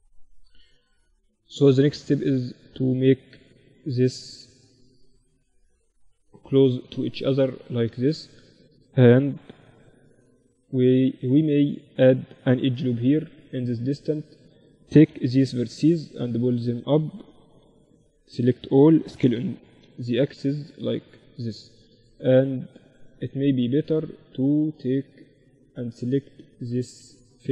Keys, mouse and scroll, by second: 0.5 b, 1.7-4.9 drag, 3.7 a, 4.9 a, 5.1 a, 5.7 b, 7.0-8.9 drag, 8.1 a, 8.9 b, 11.9 ctrl+r, 13.7 a, 14.5 b, 15.7-17.6 drag, 16.1 a, 17.0 b, 17.9-18.9 middle drag, 18.5 s, 18.9 click, 19.9 z, 23.7-25.6 middle drag, 23.9-25.9 drag, 24.5-27.5 right drag, 26.4 z, 27.2 z.